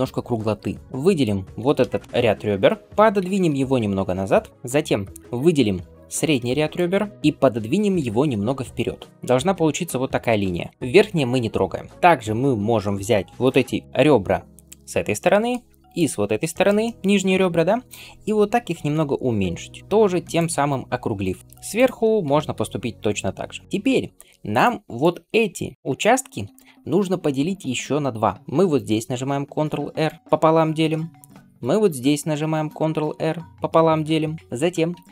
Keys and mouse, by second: 3.1 g, 6.6 ctrl+click, 6.7-9.4 ctrl+middle drag, 7.1 alt+z, 7.9 g, 9.2-10.7 d, 9.4-13.4 drag, 10.7-11.9 middle drag, 10.7-25.7 right drag, 15.8 shift+click, 18.5 s, 20.4 middle click, 22.1 s, 24.4 click, 24.4 middle click, 24.9 click, 24.9 middle click, 26.3-30.2 ctrl+shift+right drag, 27.5 click, 27.5 middle click, 28.8 ctrl+r, 30.2-35.1 middle drag, 31.2 ctrl+r.